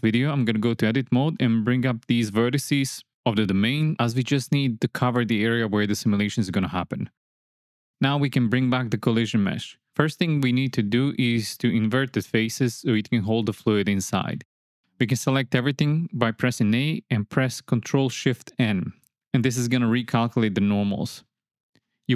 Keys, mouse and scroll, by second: 1.0 Tab, 1.3 click, 2.1 KP_1, 3.2 click, 4.4 g, 4.9 z, 6.0 click, 6.6 middle click, 7.2 Tab, 10.0 click, 11.8 click, 13.6 click, 15.1 Tab, 16.7 a, 18.9 ctrl+shift+n.